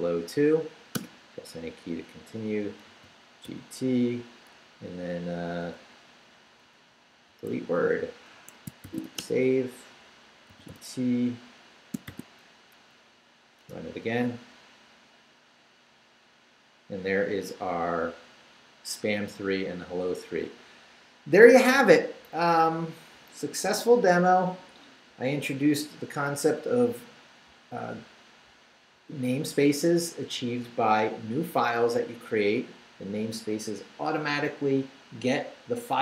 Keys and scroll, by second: 1.0 shift+Return, 2.9 g, 3.4 t, 5.3 Left, 7.0-12.1 typing, 8.3 Escape, 12.6 shift+Up, 13.6 Return.